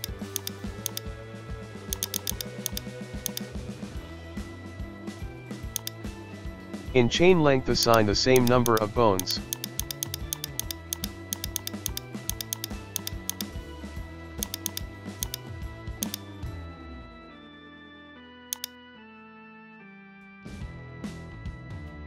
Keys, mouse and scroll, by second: 0.0 shift+right click, 0.3-0.9 drag, 1.9-3.2 drag, 3.5 middle click, 3.9 g, 6.3-6.9 scroll up 2, 6.6 shift+middle click, 6.9-8.0 middle drag, 8.0 right click, 8.9 shift+right click, 9.4 shift+right click, 10.0 shift+right click, 10.3 shift+right click, 10.5 shift+right click, 11.2 shift+right click, 11.7 shift+right click, 12.0 shift+middle click, 12.4 shift+right click, 12.7 shift+right click, 12.9-13.8 drag, 14.4-16.2 drag, 16.4 scroll down 1, 16.5-16.9 shift+middle drag, 16.9-17.5 scroll up 1, 17.5 g, 18.8-19.9 drag, 19.9 ctrl+z, 20.7 KP_1, 20.9 shift+middle drag, 21.2 scroll down 1, 21.4 shift+middle click.